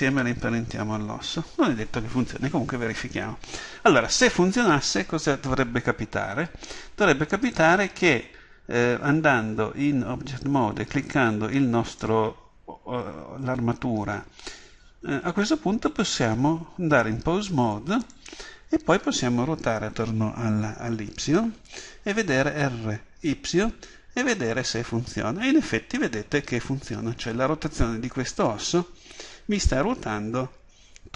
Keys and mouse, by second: 11.0 right click, 15.3-22.6 drag, 22.6 r.